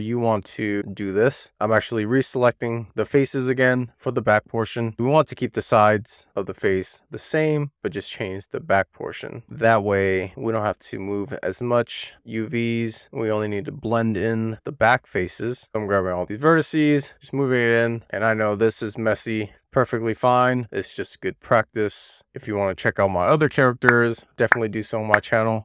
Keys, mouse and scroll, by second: 0.1 super+z, 0.4 super+z, 0.8 super+z, 1.1 super+z, 1.3 super+z, 1.5 middle click, 1.6 click, 2.1 alt+z, 2.3 scroll up 1, 3.2 ctrl+click, 3.5 ctrl+click, 3.8 ctrl+click, 4.3 ctrl+click, 4.6 middle click, 4.9 ctrl+click, 5.3 ctrl+click, 5.4 middle click, 6.4 w, 6.7 click, 8.5 middle click, 9.7-10.1 scroll down 1, 10.2 click, 10.9 click, 11.6 w, 11.8 click, 12.1 shift+middle click, 12.5 click, 13.1 1, 13.9 click, 14.5 click, 14.6 a, 15.2 scroll up 1, 15.5 click, 15.7 shift+middle click, 15.8 shift+click, 16.4 shift+middle click, 16.8 click, 16.9 middle click, 17.4 a, 17.7 click, 18.2 shift+middle click, 18.7 super+z, 18.9 super+z, 19.4 a, 19.7 scroll up 1, 20.0 middle click, 20.4 shift+middle click, 20.5 click, 21.6 click, 22.8 super+z, 22.9 click, 23.1 click, 23.8 click, 25.1 click, 25.4 click.